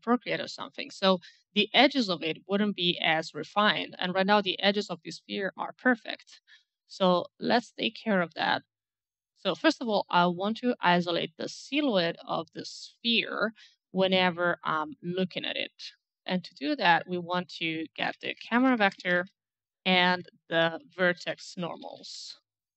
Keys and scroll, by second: 17.7-19.9 typing, 20.9-22.7 typing.